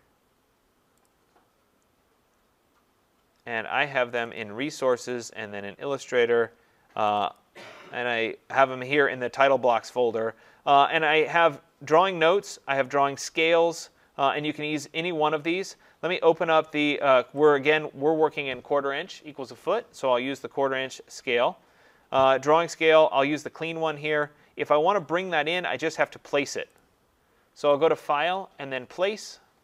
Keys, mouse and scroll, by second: 4.2 click, 4.4 click, 5.0 click, 5.2 click, 7.2 click, 7.4 click, 17.5 click, 26.8 click, 27.9 click, 29.3 click.